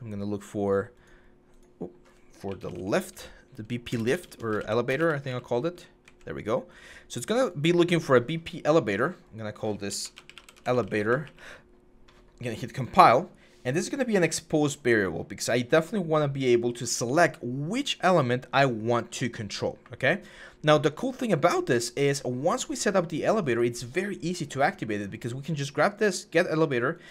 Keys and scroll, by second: 2.2-2.6 typing, 3.7-5.8 typing, 9.7-11.3 typing.